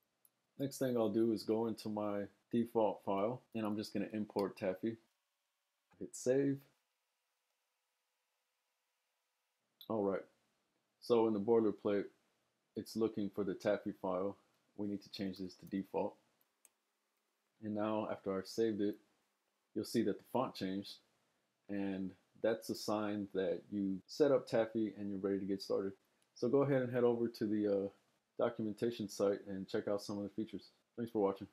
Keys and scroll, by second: 3.5-5.9 typing, 14.8-16.6 typing.